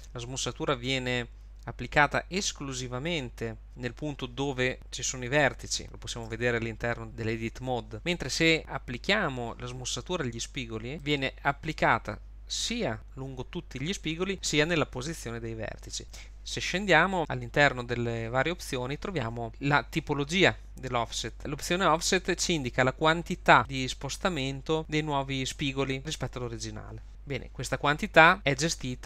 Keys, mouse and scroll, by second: 6.4 Tab, 11.0 click.